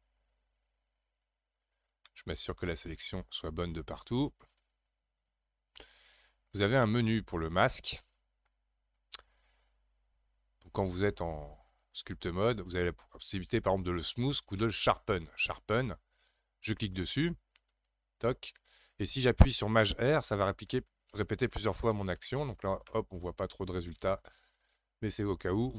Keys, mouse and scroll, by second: 0.3-2.1 drag, 2.1 middle click, 2.9 scroll up 2, 4.6-6.4 drag, 6.4 scroll down 3, 6.8-9.9 middle drag, 11.7-14.9 drag, 20.7-22.3 typing, 22.9-25.7 middle drag.